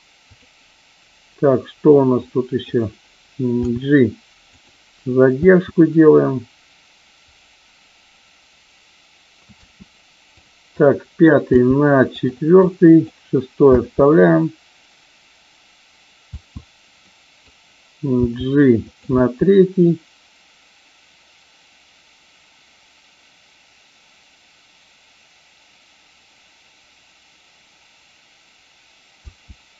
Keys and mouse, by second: 0.3 click, 2.2-2.5 drag, 3.5 g, 4.5 click, 5.3 space, 9.5 space, 10.3 click, 11.4 g, 12.0 click, 12.5-13.0 drag, 13.7 space, 16.3 space, 17.0-17.5 drag, 18.3 g, 18.8 click, 19.0 space, 29.2 space.